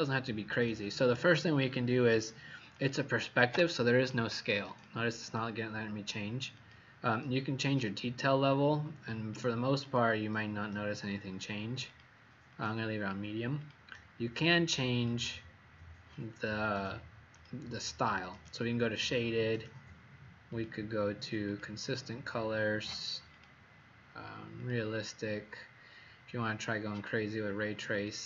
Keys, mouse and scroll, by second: 2.7 click, 3.3 click, 3.8 click, 4.6 click, 5.1 click, 6.5 click, 9.8 click, 11.8 click, 12.4 click, 13.6 click.